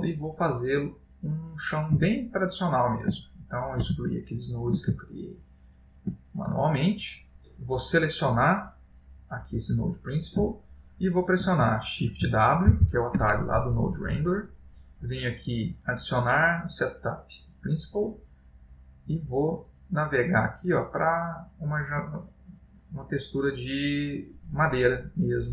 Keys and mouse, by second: 0.4 click, 2.1 x, 3.3 ctrl+middle click, 4.2 shift+middle click, 5.1 middle click, 7.1 click, 8.4 click, 10.7 click, 10.7 ctrl+middle click, 11.7 middle click, 12.8 shift+w.